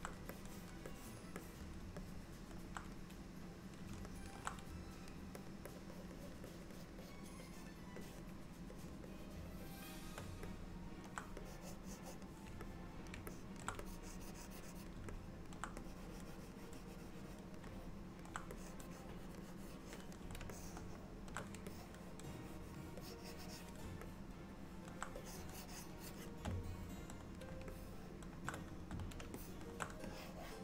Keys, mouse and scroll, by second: 0.4 click, 0.9 click, 1.5 click, 2.1 middle click, 4.2 ctrl+middle click, 5.1 shift+click, 5.4-7.6 shift+click, 5.8 click, 6.0 click, 6.2 click, 6.6 click, 6.8 click, 7.1 click, 7.5 click, 8.1 shift+click, 8.8 click, 9.7 shift+click, 10.6 middle click, 11.5 click, 12.7 middle click, 13.4 ctrl+middle click, 13.9 click, 15.2 middle click, 15.9 click, 16.7 click, 17.8 middle click, 18.6 click, 19.5 click, 20.6 shift+middle click, 21.8 click, 23.1 click, 24.1 middle click, 25.2 click, 26.7 middle click, 27.8 shift+middle click, 29.4 middle click, 30.1 click.